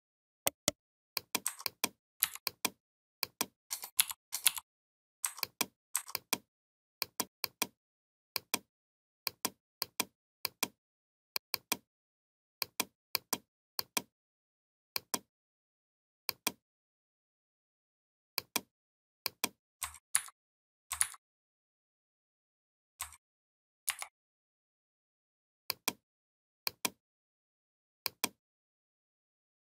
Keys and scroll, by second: 3.8 shift+m, 4.3 shift+m, 20.0 ctrl+c, 20.8 ctrl+c, 23.7 ctrl+f.